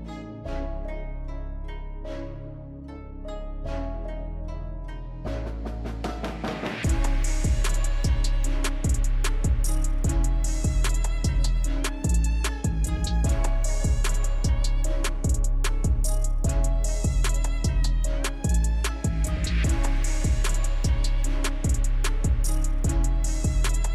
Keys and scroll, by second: 15.3 ctrl+z, 23.5 ctrl+z.